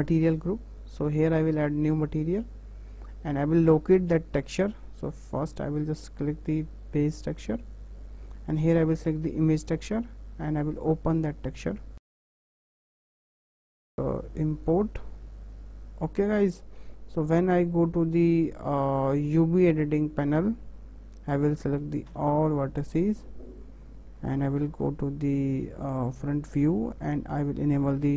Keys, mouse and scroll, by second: 0.0 click, 1.9-4.9 drag, 5.5 click, 6.6-7.7 drag, 9.5-12.3 drag, 15.5-15.9 scroll down 3, 15.9-18.8 scroll up 3, 19.5-22.1 drag, 22.1 a, 22.5-22.9 scroll up 2, 22.9 shift+middle click, 23.2-23.9 scroll down 2, 25.8 `, 26.5 shift+middle click, 27.1-28.1 scroll up 6.